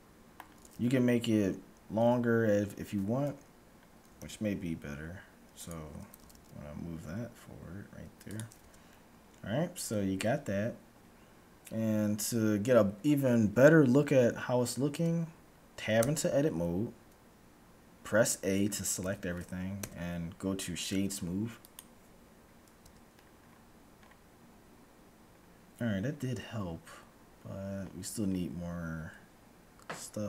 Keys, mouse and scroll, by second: 1.2 middle click, 2.0 Tab, 3.9-5.7 middle drag, 4.0 g, 6.0 g, 8.7 Tab, 9.0-11.4 middle drag, 12.0-14.0 middle drag, 16.0 Tab, 18.7 a, 19.0 a, 19.9 w, 22.9 Tab, 23.4-30.0 middle drag, 23.4-25.5 scroll up 1, 25.9 scroll down 1, 27.9-28.7 scroll down 1, 28.7-29.9 scroll up 1, 29.9 scroll up 1.